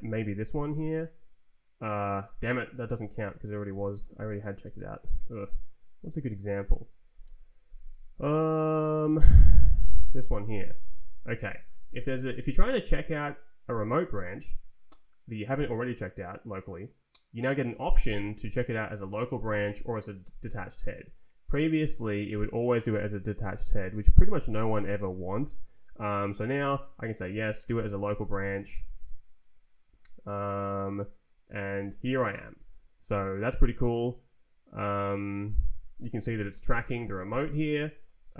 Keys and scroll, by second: 0.5 Return, 3.1 Down, 4.5 space, 5.5 Down, 7.2 c, 9.2 Tab, 9.6 Down, 10.7 Return, 27.5 Return, 36.2 shift+=.